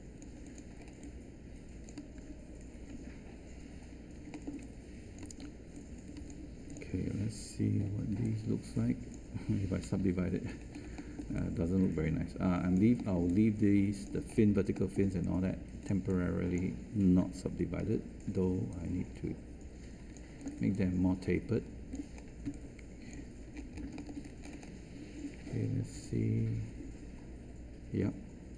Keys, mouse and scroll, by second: 2.9 q, 7.8 3, 9.8 1, 17.8 r, 22.4 space.